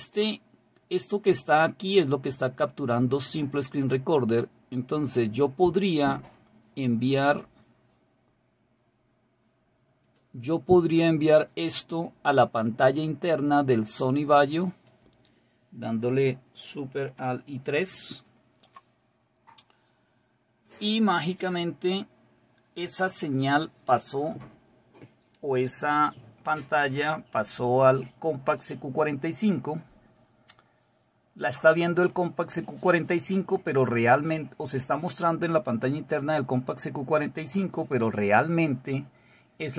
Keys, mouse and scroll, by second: 6.9 click.